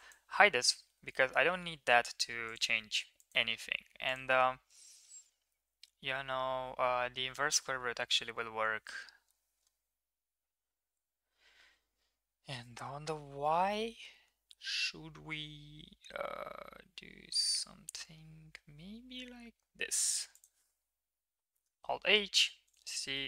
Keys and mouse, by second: 0.1 click, 0.8 h, 2.4 click, 3.1 click, 4.2-7.3 drag, 8.3 g, 21.7 alt+h, 22.3 Tab, 22.6 drag, 22.9 middle drag.